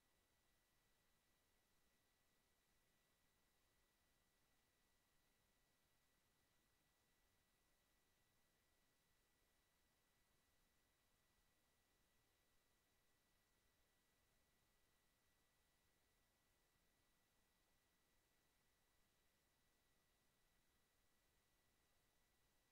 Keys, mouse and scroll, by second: 1.2 click, 3.7 click, 5.6 click, 6.2 click, 9.1 click, 10.1 click, 10.6 click, 11.7 click, 12.7 click, 13.9 ctrl+z, 14.4 click, 15.3 click, 15.9-17.5 drag, 17.7 ctrl+z, 20.1 click, 22.6 click.